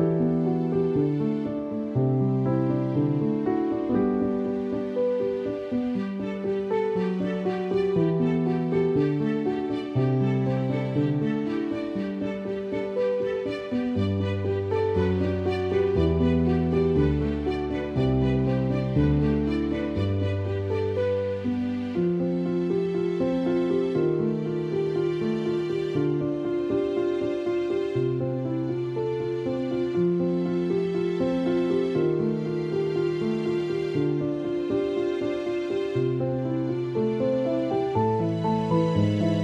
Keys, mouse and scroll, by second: 5.2 click, 5.3 ctrl+d, 6.1 click, 8.4 click, 9.0 Down, 13.8 click, 15.6 Down, 18.8 click, 19.8-21.9 typing, 19.9 click, 23.7 ], 26.3 [, 27.2 ], 28.6 ctrl+-, 29.9 click, 30.6 space, 30.9 click, 31.7 click, 33.0 ctrl+click, 34.6 ctrl+e, 35.7 click, 36.6 space, 36.8 click, 36.9 space, 37.4 ctrl+=, 38.5 space, 38.7 click, 38.8 space.